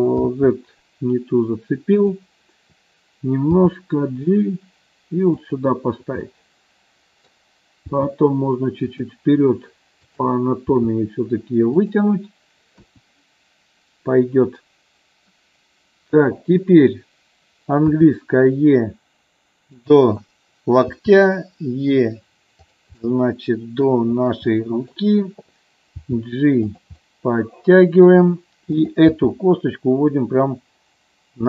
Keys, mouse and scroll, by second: 0.5 ctrl+z, 3.7 g, 5.6 click, 6.5 middle click, 8.1 g, 9.1 click, 11.0 g, 11.8 click, 12.9 KP_1, 18.1 e, 19.8 click, 21.1 e, 23.1-24.1 middle drag, 24.6 middle click, 26.2 g, 26.8 click, 27.2 middle click, 29.2 g.